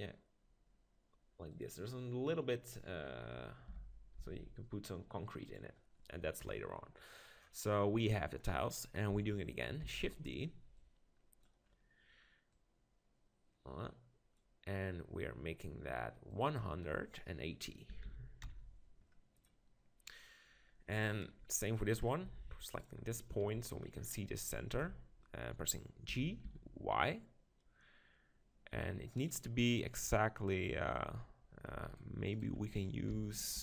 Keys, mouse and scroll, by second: 1.6-3.4 drag, 3.7 g, 5.5-7.4 drag, 6.4 KP_7, 7.4-9.6 middle drag, 9.9 shift+d, 10.8-14.5 drag, 16.3-18.3 drag, 22.0 middle click, 22.2 Tab, 22.8-24.0 drag, 24.8 Tab, 26.1 g, 29.3-31.1 drag, 31.1 middle click, 31.9-33.6 right drag, 33.1 g.